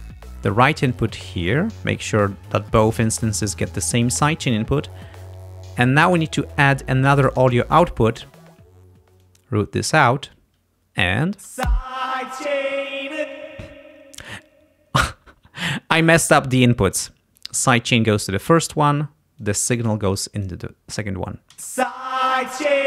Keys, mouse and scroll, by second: 0.8 click, 2.4-4.3 drag, 7.5 click, 9.3-10.3 drag, 11.4 space, 13.3 space, 17.5-18.9 drag, 19.5-20.7 drag, 21.6 space.